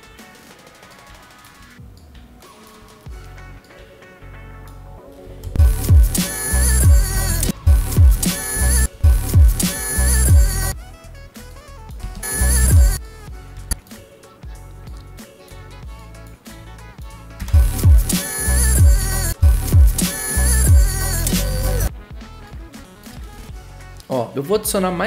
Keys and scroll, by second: 5.4 0, 23.4 v.